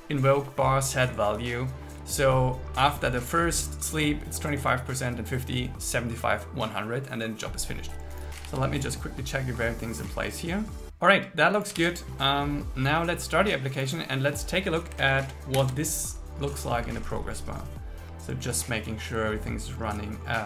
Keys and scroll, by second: 8.5 super+s, 11.9 super+s, 15.6 ctrl+shift+r.